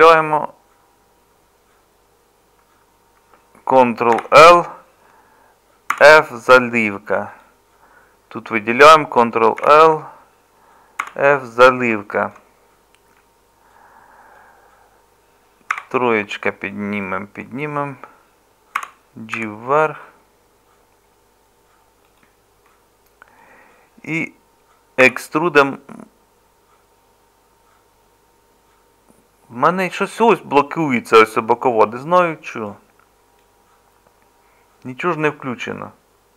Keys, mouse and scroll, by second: 4.2 ctrl+l, 5.9 f, 9.6 ctrl+l, 11.0 f, 15.7 3, 25.0 e.